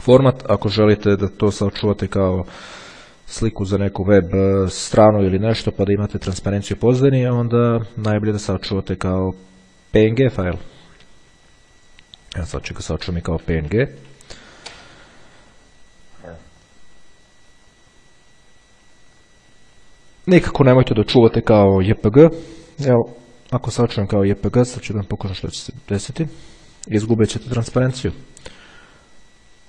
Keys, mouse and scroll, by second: 0.9 click, 10.6 click, 12.4 click, 13.1-14.0 typing, 14.5 Return, 17.0 click, 23.0 click, 24.8 click, 26.3 click, 26.7-28.0 typing, 28.2 Return.